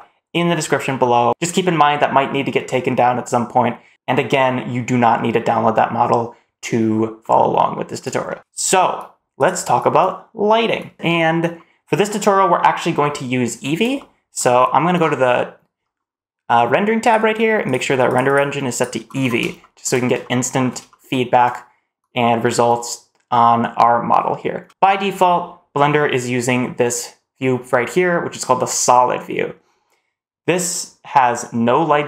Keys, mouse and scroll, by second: 0.9 shift+middle click, 2.6-3.5 middle drag, 3.9-5.4 scroll up 1, 7.1-7.5 middle drag, 8.1 shift+middle click, 13.8-14.2 shift+middle drag, 16.9 click, 17.5 click, 18.1 click, 19.5 shift+middle click, 19.8 scroll down 1, 20.1 shift+middle drag, 20.2 shift+middle click, 20.7 shift+middle click, 24.6 shift+middle click, 31.9-32.0 middle drag.